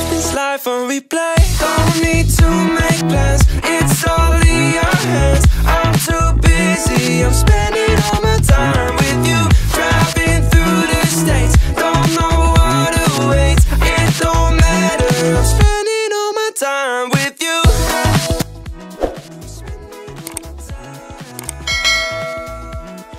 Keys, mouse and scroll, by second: 2.1-3.3 scroll up 4, 5.0-5.9 drag, 7.1 scroll down 1, 7.7-8.0 scroll down 1, 9.1-9.9 scroll down 2, 10.7 click, 11.5-12.1 scroll up 2, 12.2-12.6 shift+middle drag, 13.4 click, 14.9 click, 15.2 space, 21.8 space.